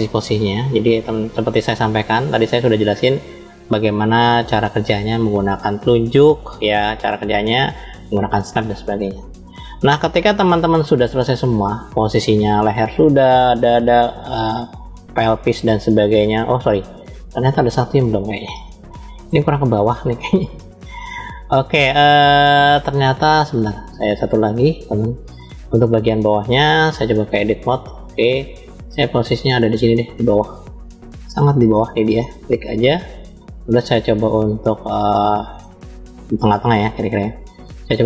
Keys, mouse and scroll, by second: 0.0 scroll down 3, 0.8 middle click, 1.9 scroll up 2, 2.8-3.1 scroll up 2, 3.7 scroll up 1, 7.4 click, 9.6-10.2 scroll down 5, 10.8-12.0 shift+middle drag, 13.2 shift+middle click, 14.6 shift+middle click, 15.3 middle click, 16.5 shift+middle click, 17.5 KP_1, 18.4 shift+middle click, 19.8-20.1 scroll up 2, 20.5 scroll up 2, 20.6 shift+middle click, 23.1 click, 23.6 click, 24.0-24.8 drag, 27.1-27.9 drag, 28.7-29.8 middle drag, 29.9-31.0 scroll down 3, 31.0 middle click, 32.2 click, 34.7 middle click, 35.8 shift+middle click, 37.4 click.